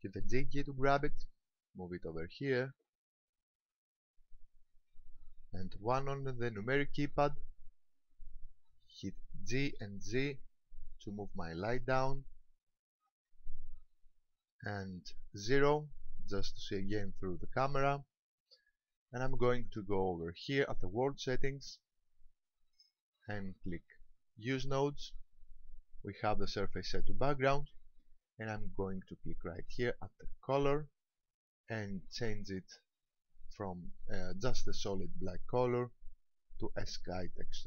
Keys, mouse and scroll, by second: 0.3 g, 4.7 ctrl+click, 7.0 KP_1, 8.5-8.9 scroll down 1, 9.7 g, 13.1 ctrl+click, 15.5 KP_0, 21.7 click, 24.5 click, 30.5 click.